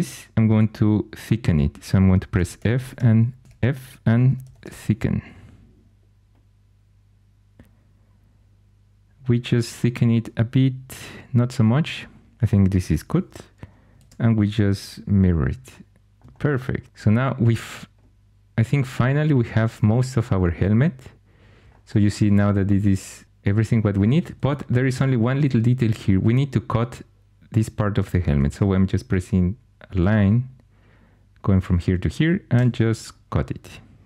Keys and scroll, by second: 2.0-5.0 typing, 12.8 4, 13.9 alt+x, 16.8 alt+h, 28.4 shift+a, 32.5 c.